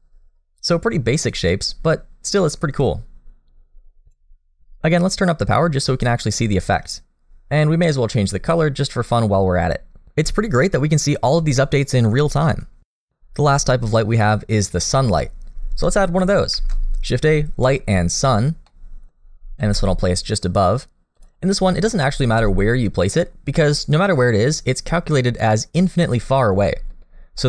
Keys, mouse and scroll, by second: 0.6 click, 2.4 click, 5.1 click, 7.8 click, 11.4 middle click, 16.5 shift+a, 18.7 middle click, 19.2-21.4 scroll down 2, 19.6 g, 21.4 middle click, 21.9 g, 24.9 middle click, 25.4 scroll down 1, 25.6 middle click, 26.5 r.